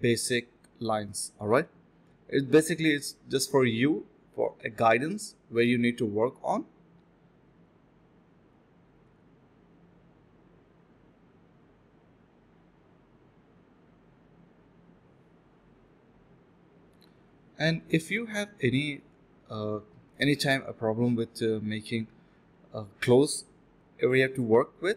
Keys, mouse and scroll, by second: 0.0 alt+click, 0.2 alt+click, 0.4 ctrl+b, 0.6 double click, 1.1 typing, 2.6 shift+click, 3.5 alt+click, 4.2 alt+click, 4.7 ctrl+b, 6.3-6.8 typing, 9.6 typing, 10.6 alt+click, 11.0 ctrl+b, 11.3-11.9 typing, 12.1 alt+click, 13.1 shift+click, 13.6 ctrl+b, 13.9 typing, 15.2 alt+click, 16.0 double click, 16.5-17.4 typing, 18.1 shift+click, 18.2 shift+double click, 18.5 ctrl+z, 18.6 d, 18.8 shift+click, 18.9 shift+double click, 19.0 shift+click, 21.1 d, 21.2 alt+click, 21.4 alt+click, 21.5 alt+click, 22.0 alt+click, 22.1 alt+double click, 22.3 alt+double click, 22.4 alt+click, 22.9 ctrl+b, 23.3 double click, 23.4 typing, 23.9 double click, 24.2 ctrl+z, 24.3 alt+click.